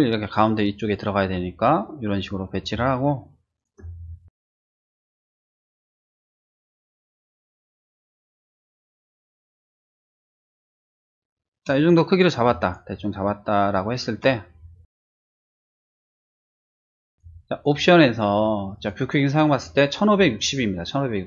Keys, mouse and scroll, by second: 2.7 space, 2.8 click, 4.7 middle click, 6.2 ctrl+shift+z, 7.1 shift+z, 8.2 middle click, 15.5 ctrl+shift+z, 17.1 click, 17.5 click, 18.8 click, 20.1 click.